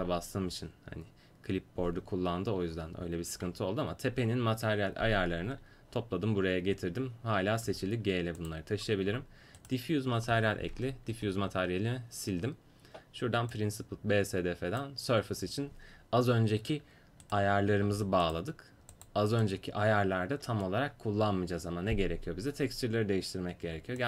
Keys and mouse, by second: 7.7 g, 9.6-10.8 drag, 10.8 Insert, 11.0-17.3 drag, 11.2 Delete, 17.3 right click, 17.9 g, 24.0 click.